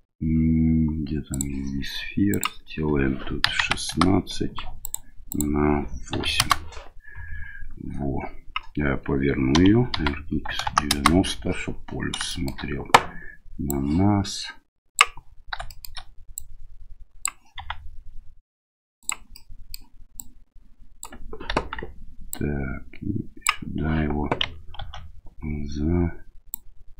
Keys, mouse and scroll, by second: 2.3-5.0 drag, 5.3-6.7 drag, 9.5 r, 12.3 shift+middle click, 13.7-15.0 drag, 15.7 shift+middle click, 16.3 click, 17.6 s, 19.3-19.8 middle drag, 20.2 click, 21.5 KP_1, 22.3-23.5 drag, 24.8 ctrl+2, 26.5-26.9 drag.